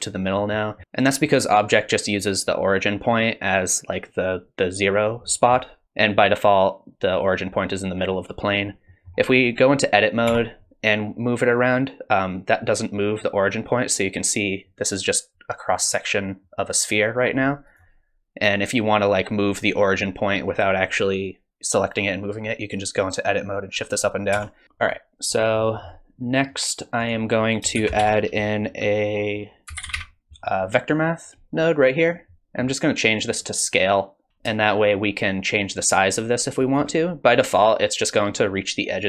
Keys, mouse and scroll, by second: 0.5 middle click, 0.8 middle click, 5.2 middle click, 8.9 middle click, 10.3 Tab, 11.1 click, 18.5 click, 24.3 Tab, 24.6 middle click, 24.6 scroll down 3, 24.6 KP_1, 24.9 click, 25.6 middle click, 26.5 click, 27.0 click, 27.8 shift+a, 32.6-33.2 scroll up 1, 33.2 click, 33.2-34.3 scroll up 2, 34.3 middle click, 34.6 shift+click.